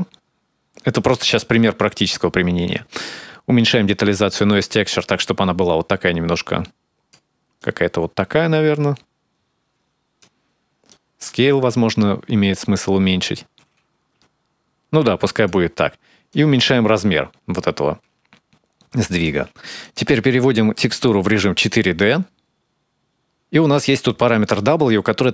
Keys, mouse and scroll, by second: 3.7 click, 7.4 click, 10.7 click, 16.1 shift+click, 19.6 click.